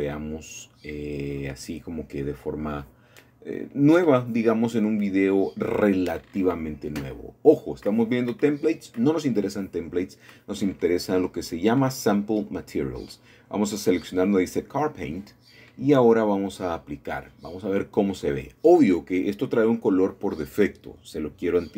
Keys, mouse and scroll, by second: 3.1 click, 4.2 click, 7.8 click, 8.7 click, 10.6-11.5 scroll down 2, 11.5-11.9 scroll down 1, 11.9-13.0 drag, 15.8-16.9 drag, 18.6-19.7 drag.